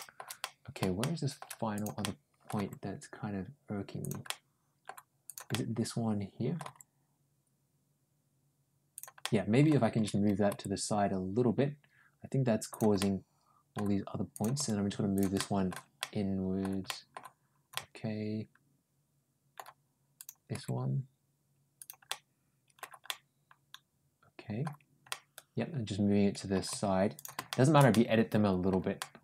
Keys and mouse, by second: 0.2 middle click, 1.6 click, 1.8 middle click, 2.4 g, 4.1 middle click, 5.1 click, 5.3-6.4 middle drag, 6.5 g, 9.0 middle click, 10.3 ctrl+g, 12.8 middle click, 14.2 click, 14.4 g, 15.2 middle click, 15.8 middle click, 16.7 middle click, 17.6-19.4 middle drag, 20.0 click, 20.4 g, 21.9 middle click, 22.9 middle click, 23.4-24.4 middle drag, 24.9-26.4 middle drag, 26.5 g, 27.3 middle click, 27.7 middle click, 28.8 middle click.